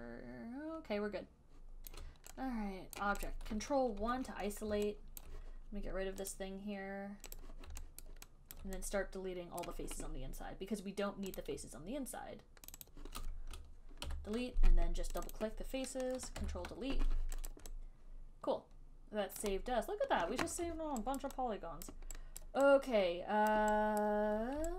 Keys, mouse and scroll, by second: 2.1 alt+click, 3.3 click, 3.5 click, 4.3 ctrl+1, 5.5 alt+click, 6.5 click, 7.7 click, 8.4 alt+right click, 9.0 alt+click, 9.0 alt+right click, 9.9 right click, 11.6 click, 13.0 shift+click, 13.2 shift+click, 14.3 ctrl+Delete, 15.5 click, 15.7 click, 16.7 ctrl+Delete, 17.8 alt+right click, 19.2 alt+right click, 19.7 alt+right click, 21.5 alt+click, 22.2 alt+click, 22.7 alt+right click, 23.8 alt+click, 24.3 alt+right click.